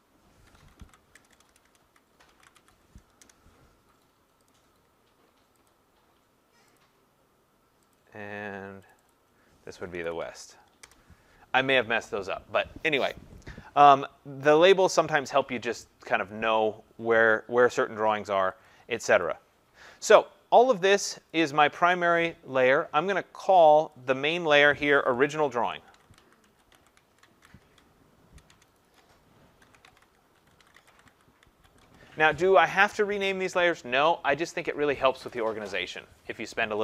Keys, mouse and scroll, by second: 0.2-3.1 typing, 3.2 Return, 4.5 click, 5.7 click, 6.8 click, 8.9 click, 9.1 click, 9.6-10.8 typing, 18.6 click, 19.2 click, 21.3 click, 23.7 click, 23.9 click, 25.6-32.2 typing.